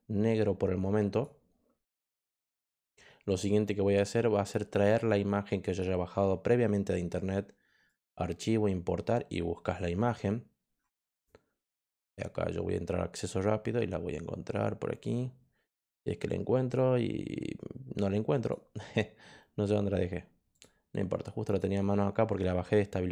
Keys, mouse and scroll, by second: 1.0 click, 1.8 click, 5.6 click, 7.8 click, 11.7 click, 18.3 click, 20.5 click, 21.4 click.